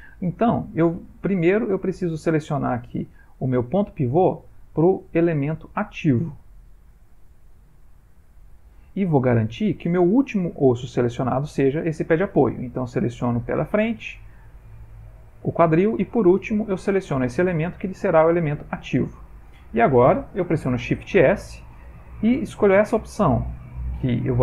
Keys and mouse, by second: 2.2 click, 12.9 click, 14.5 shift+click, 21.2 shift+s.